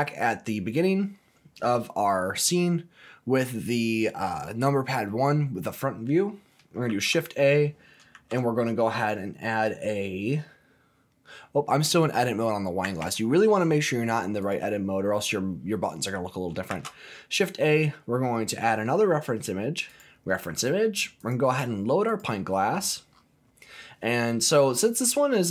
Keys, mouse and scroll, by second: 6.7 shift+a, 8.0 shift+a, 12.8 Tab, 14.4 click, 16.7 shift+a, 19.9 shift+a, 23.1-24.5 scroll up 4, 24.5-24.9 scroll down 1, 25.0-25.5 middle drag.